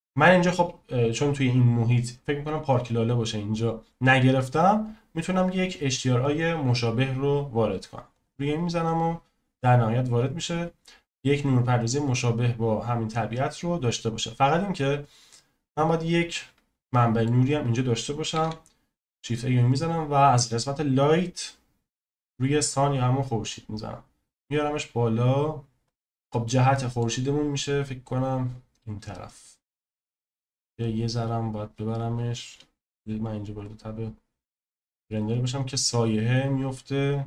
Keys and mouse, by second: 16.9-17.2 middle drag, 18.3 shift+a, 24.2 click, 25.9 click, 26.1-26.5 middle drag, 26.7 middle click, 28.1 click, 30.8 click, 32.9 z.